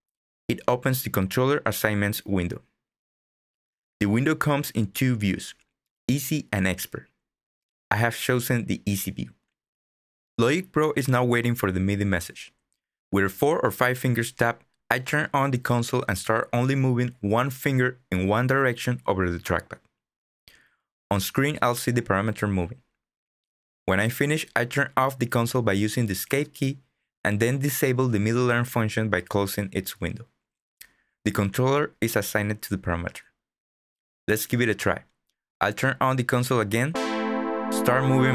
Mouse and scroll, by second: 28.6 click, 29.4 click.